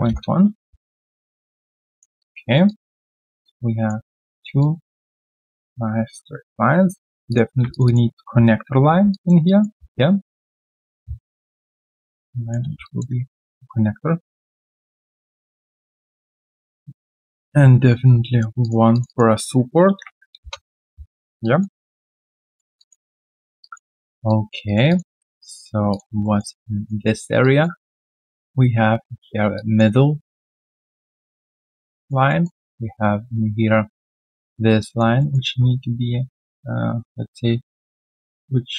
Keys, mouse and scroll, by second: 0.0 Return, 1.0 right click, 1.6-2.2 scroll down 1, 2.2 alt+click, 2.4 alt+right click, 2.6 alt+click, 4.0 alt+middle click, 4.3 alt+right click, 4.6 alt+click, 5.3 alt+right click, 6.1 right click, 7.7 shift+click, 7.8 shift+double click, 9.1 alt+click, 9.7 w, 11.4-12.8 typing, 14.5 alt+middle click, 14.8 alt+click, 15.4 alt+middle click, 15.7 alt+click, 16.3 alt+middle click, 16.7 alt+click, 17.5 right click, 19.0 shift+click, 19.0 shift+double click, 21.1 alt+right click, 21.4 alt+click, 21.7 alt+right click, 22.1 right click, 22.7 alt+click, 23.1-23.5 alt+scroll down 1, 23.6 alt+click, 23.9 alt+middle click, 24.2 alt+click, 24.6 alt+right click, 24.8 alt+click, 25.1 alt+middle click, 25.4 alt+click, 26.2 alt+middle click, 26.5 alt+click, 27.0 alt+middle click, 27.4 alt+click, 29.4 alt+click, 31.4 alt+click, 31.6 alt+middle click, 32.0 alt+click, 32.2 alt+middle click, 34.8 alt+click, 35.1 alt+middle click, 36.2 alt+middle click, 38.0 alt+middle click.